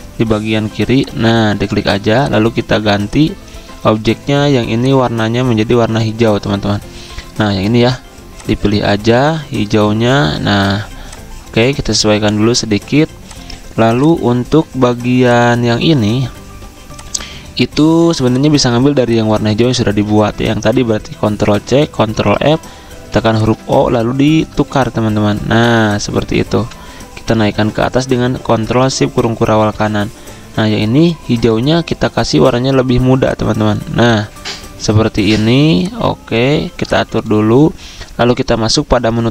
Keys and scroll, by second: 1.2 v, 19.5 ctrl+z, 21.3 ctrl+c, 22.1 ctrl+f, 23.0 o, 26.5 v, 31.4 v.